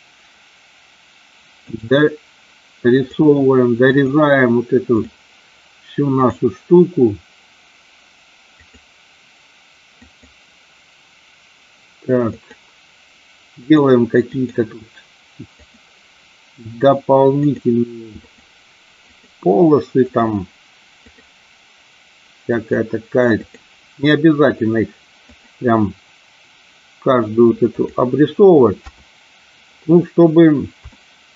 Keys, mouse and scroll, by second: 30.9 shift+middle click.